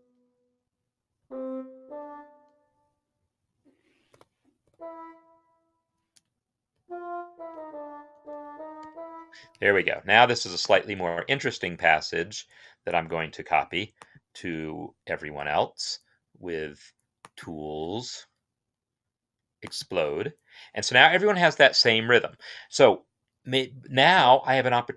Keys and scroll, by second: 1.0 Right, 1.6 Right, 3.9-4.9 typing, 6.5 Up, 6.9-8.6 typing, 9.2 Escape.